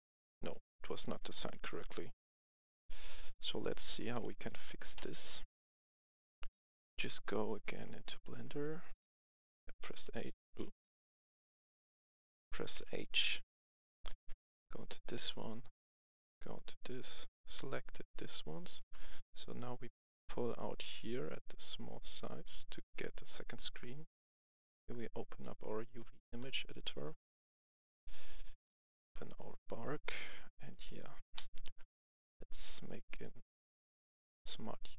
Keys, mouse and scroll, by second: 0.0-0.2 typing, 3.0 typing, 4.2-5.2 typing, 6.1 click, 6.2 F11, 6.4 F10, 6.9 click, 8.5 right click, 9.8 h, 11.0 ctrl+z, 11.9 right click, 12.7 h, 13.1-13.6 scroll up 1, 13.6 right click, 14.1 Tab, 16.0 click, 19.6-22.7 drag, 24.0 click, 26.4-27.1 scroll down 1, 27.8 click, 30.3-31.3 scroll up 1, 31.3-32.2 scroll up 1, 33.1 click, 34.0 click.